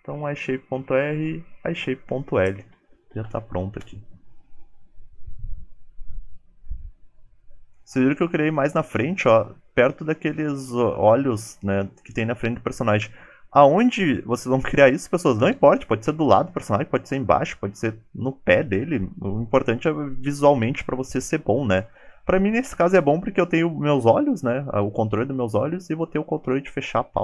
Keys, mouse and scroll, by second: 7.3 middle click.